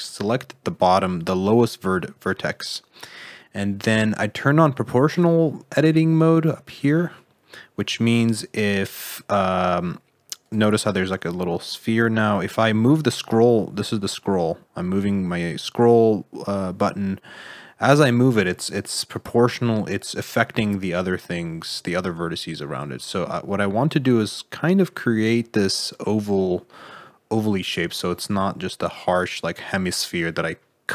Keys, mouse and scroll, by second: 8.0 g, 11.0 g.